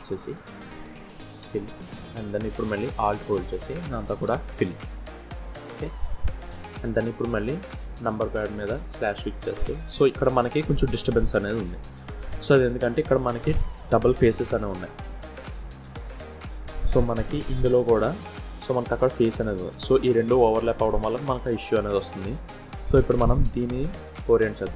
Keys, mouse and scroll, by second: 1.0 f, 2.2 click, 2.7 alt+click, 3.9 f, 4.5-5.2 scroll down 3, 4.9 middle click, 8.3 KP_Divide, 9.0 scroll down 1, 9.3 middle click, 9.7-10.2 scroll up 4, 10.2 scroll down 1, 10.4 scroll up 1, 11.8 scroll down 1, 15.2 Tab, 16.6 click, 17.8 g.